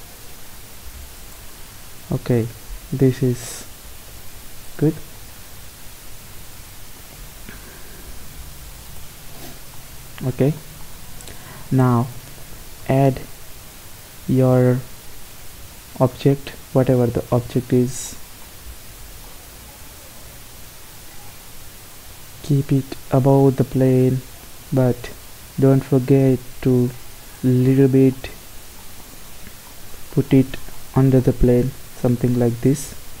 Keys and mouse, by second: 2.4-4.3 right drag, 3.8 g, 5.6 s, 9.4 middle click, 9.8-12.9 middle drag, 12.9 shift+a, 16.8-17.9 middle drag, 20.3 r, 22.1 g, 24.7 g, 30.8-33.2 middle drag.